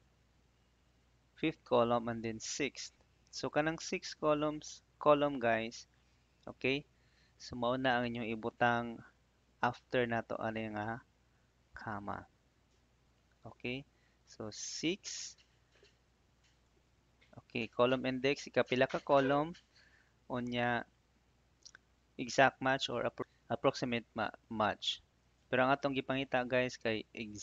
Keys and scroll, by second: 11.6 ', 14.7 6, 19.5 '.